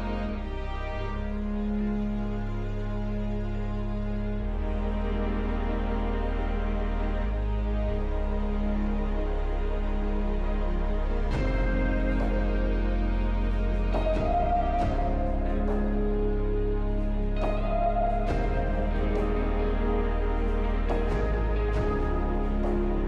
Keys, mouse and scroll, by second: 0.3 middle click, 12.9 double click, 13.9 double click, 22.7 alt+middle click.